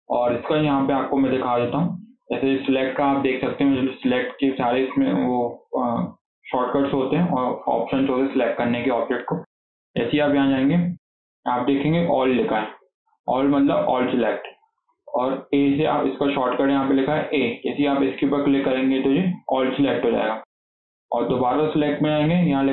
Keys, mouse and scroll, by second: 8.8-11.9 drag, 21.8-22.7 drag.